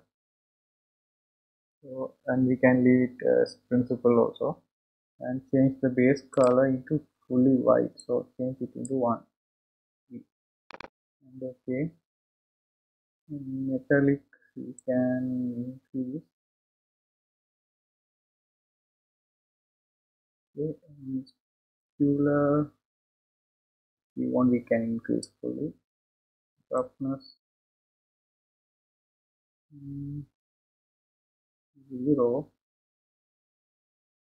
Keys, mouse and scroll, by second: 8.3 click, 15.1-17.9 drag, 22.1-24.9 drag, 27.0-29.9 drag.